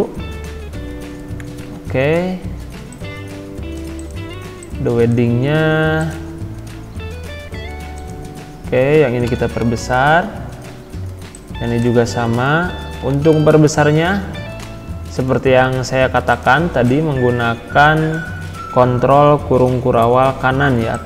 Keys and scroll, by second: 1.8 ctrl+z, 9.3 ctrl+], 12.3 ctrl+], 19.8 shift+7.